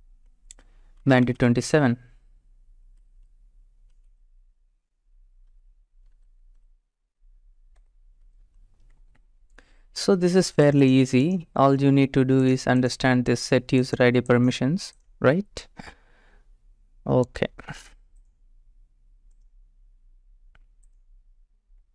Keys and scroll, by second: 0.0-6.6 typing, 7.8 Return.